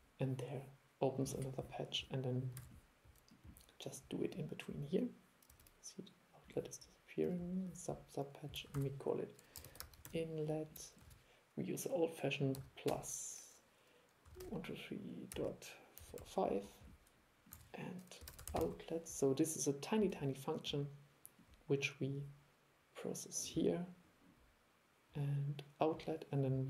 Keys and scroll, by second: 2.7 super+e, 8.8 super+1, 11.2 super+1, 17.6 super+1.